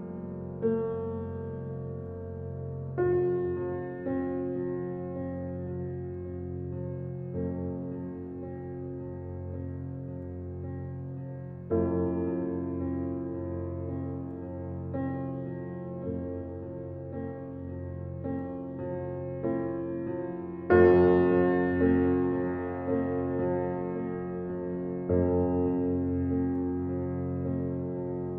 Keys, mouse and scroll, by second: 4.1 click, 4.9 shift+d, 12.8-13.4 scroll down 1, 13.4 drag, 14.9 g, 17.9 scroll down 1, 18.6-21.1 shift+middle drag, 21.1 shift+a, 27.1 scroll up 1.